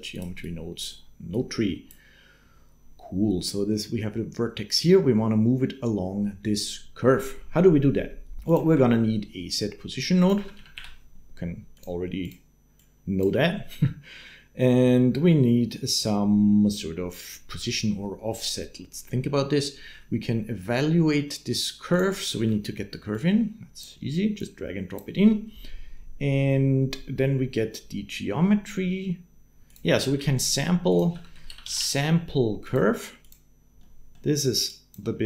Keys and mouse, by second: 1.1 click, 8.3 click, 8.5 shift+a, 12.8 click, 14.1 middle click, 21.7 click, 22.9 click, 24.4 click, 29.5 click, 29.8 shift+a, 33.6 click, 34.5 click, 35.1 click.